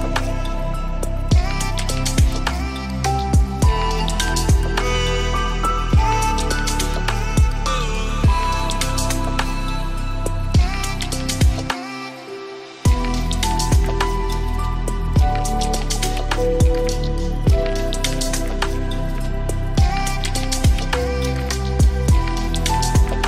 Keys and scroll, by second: 4.3 ctrl+space.